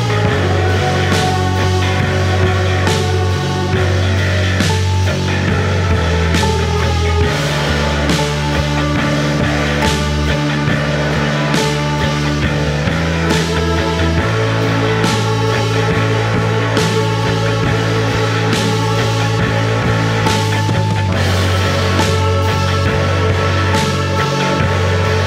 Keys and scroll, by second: 0.1 ], 5.8 ], 6.2 ], 7.8-10.0 typing, 12.6 Return, 12.8 ], 12.9 Escape, 13.0 ], 14.8 4, 17.1 3, 24.5 Delete.